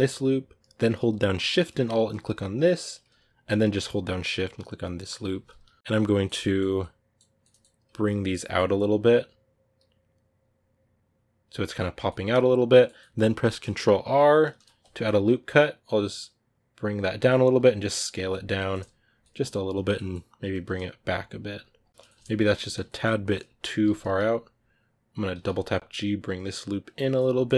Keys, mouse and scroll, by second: 5.8-11.5 middle drag, 11.5 scroll down 2, 12.0-16.9 middle drag, 16.9 scroll up 1, 18.1-21.7 middle drag, 21.7 Tab, 21.8 scroll down 2, 21.9 middle click, 22.4 alt+right click, 23.2-23.5 scroll up 1, 26.8 scroll down 5, 26.9 middle click, 27.4-27.5 scroll down 1.